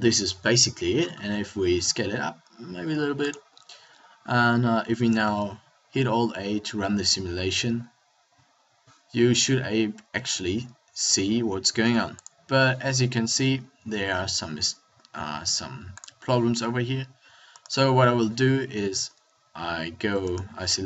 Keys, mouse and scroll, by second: 0.4 KP_1, 1.7 s, 3.5 click, 5.2 alt+a, 13.6 middle click, 14.3 s.